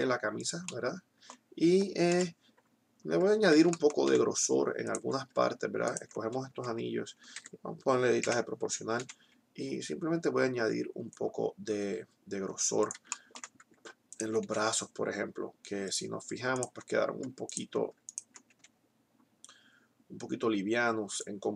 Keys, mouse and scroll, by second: 2.3 KP_1, 4.8 middle click, 5.6-7.6 right drag, 6.4 s, 8.3 o, 8.9 s, 12.8 click, 13.3 middle click, 14.4 s, 14.8-17.6 drag, 18.6 s, 21.1-21.5 drag.